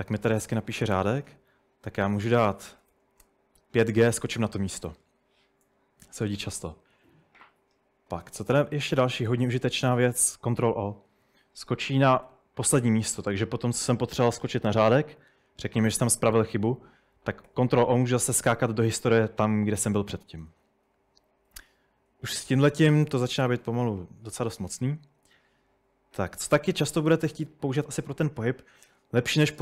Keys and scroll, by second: 1.1 typing, 3.0-3.6 typing, 12.3 ctrl+o, 17.5 ctrl+o, 18.2 ctrl+o, 19.9-20.8 typing, 29.5-29.6 typing.